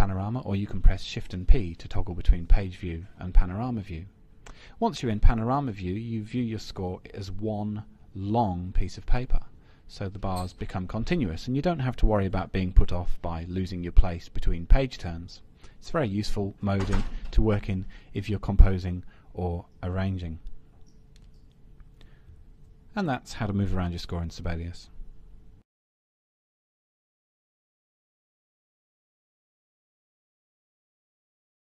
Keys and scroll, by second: 22.3 shift+p.